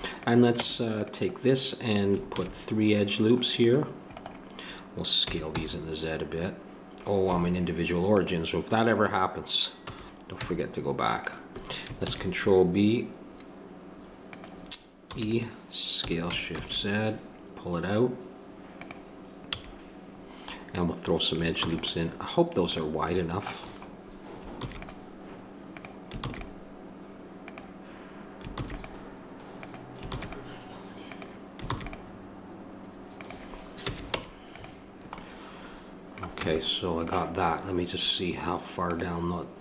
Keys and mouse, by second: 0.3 click, 0.6 Tab, 2.3 ctrl+r, 5.2 s, 8.1-11.2 drag, 9.8 s, 12.1 ctrl+b, 15.1 e, 19.5 a, 21.6 ctrl+r, 24.6 ctrl+r, 26.3 ctrl+r, 28.6 ctrl+r, 30.1 ctrl+r, 33.8 a, 34.1 Tab, 36.4 a.